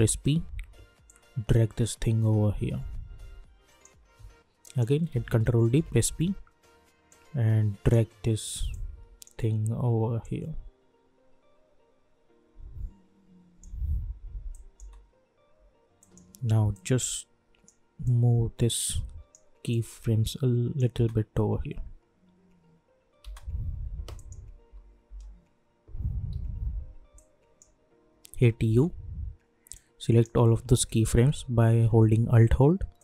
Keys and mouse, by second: 1.0-4.6 drag, 5.1 ctrl+d, 5.7 p, 7.1-14.5 drag, 14.7 space, 16.0-20.9 drag, 18.3-19.6 drag, 20.0 click, 20.9 space, 23.2 space, 24.1 click, 24.7-25.0 typing, 26.3 typing, 27.1-28.6 drag, 28.6 u, 29.7-31.1 drag, 31.1 =, 31.2 =.